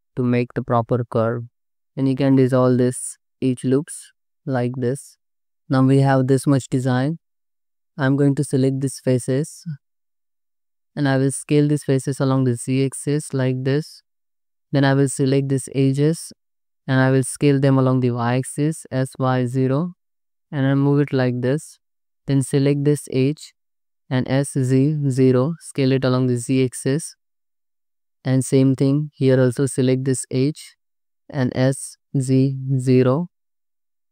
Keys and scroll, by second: 7.6 3, 12.0 s, 12.4 z, 14.3 2, 17.5 s, 18.0 y, 19.1 0, 22.0 ctrl+z, 22.1 2, 24.0 s, 24.4 z, 25.8 0, 31.7 s, 32.1 z, 33.2 0.